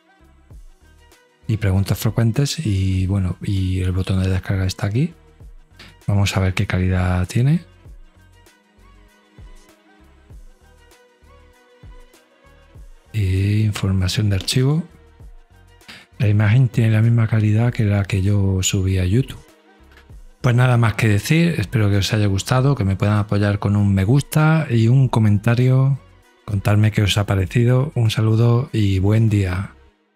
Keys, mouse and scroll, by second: 0.9 Down, 1.0 Right, 2.1 middle click, 2.4 middle click, 2.7-4.0 middle drag, 4.0 click, 5.5-6.7 drag, 8.6 click, 11.1 right click, 13.8 click.